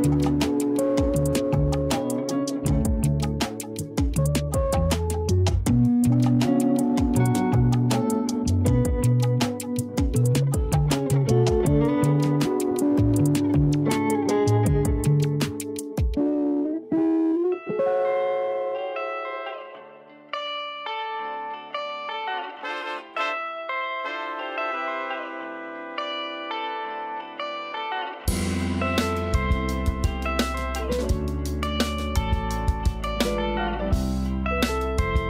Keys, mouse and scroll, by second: 0.0 scroll up 2, 0.3 r, 2.8 g, 4.1 middle click, 5.0-5.6 scroll down 1, 5.6 KP_1, 6.7-7.2 scroll up 1, 7.2 g, 8.9 s, 11.2-12.2 scroll up 5, 12.2 shift+middle click, 12.7-13.1 scroll up 3, 13.1 g, 16.9-17.5 scroll down 2, 17.1 Tab, 17.8 scroll up 1, 18.1-18.4 scroll down 3, 18.4 a, 18.6 a, 19.9-20.3 scroll up 7, 20.7 Tab, 21.1 scroll down 2, 21.4-22.9 scroll up 2, 22.9 shift+middle click, 23.4-24.0 scroll up 1, 24.0 s, 25.9 s, 27.9 scroll up 2, 28.1 g, 29.4-29.9 scroll down 2, 29.9 KP_2, 30.1 KP_3, 30.7-31.1 scroll up 3, 31.1 g, 33.1 middle click, 34.0-35.2 scroll down 6.